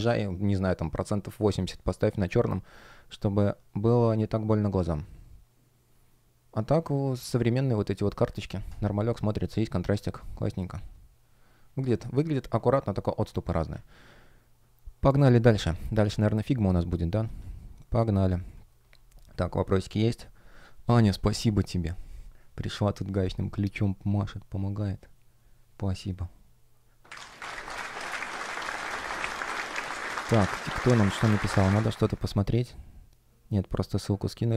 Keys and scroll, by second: 17.2 F1, 29.0 super+\, 29.6 space.